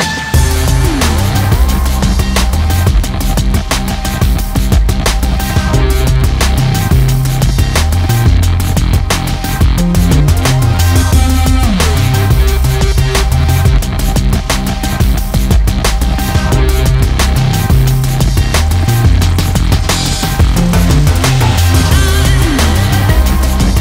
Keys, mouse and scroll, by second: 1.4 click, 8.3 click, 12.0 KP_7, 12.2 scroll down 1, 12.6 z, 13.4 click, 13.6 a, 14.6 click.